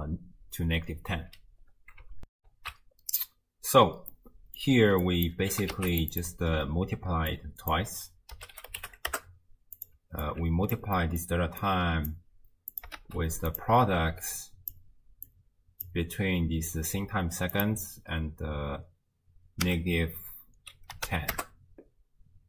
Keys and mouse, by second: 2.4 ctrl+alt+shift+w, 2.5 ctrl+alt+shift+q, 4.2 click, 5.0 click, 5.5 g, 6.2 click, 7.3-10.0 drag, 10.2 alt+click, 11.0 click, 11.6 click, 12.7 click, 13.0 shift+d, 14.3 click, 15.3-15.9 drag, 17.5-21.4 drag.